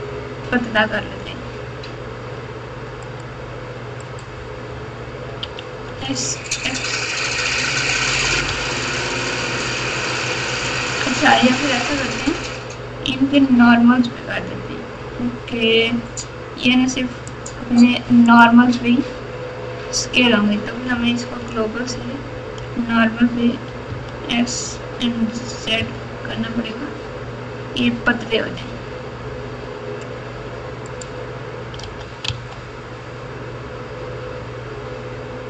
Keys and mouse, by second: 1.2 s, 5.4 s, 17.2 click, 23.8 s, 31.8 s.